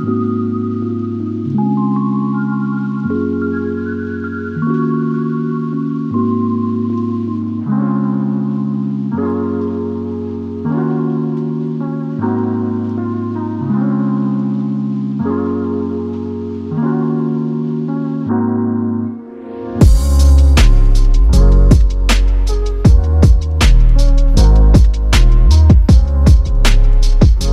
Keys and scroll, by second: 19.2 space, 26.2 typing.